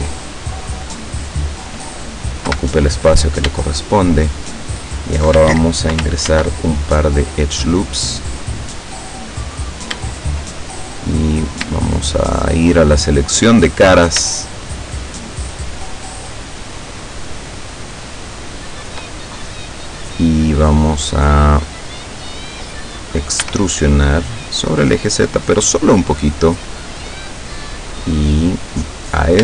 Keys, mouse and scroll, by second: 0.6-1.7 drag, 2.5 KP_7, 3.6 shift+middle click, 6.3 ctrl+r, 7.1 middle click, 7.1 scroll up 2, 7.8 click, 9.6 right click, 11.2 right click, 13.0 click, 13.8 right click, 14.4 shift+right click, 15.0 shift+right click, 15.4 shift+right click, 16.0 shift+right click, 17.9 shift+right click, 18.6 shift+right click, 19.2-21.8 shift+middle drag, 23.4 e, 25.6 click, 25.9-28.0 middle drag, 29.0 right click.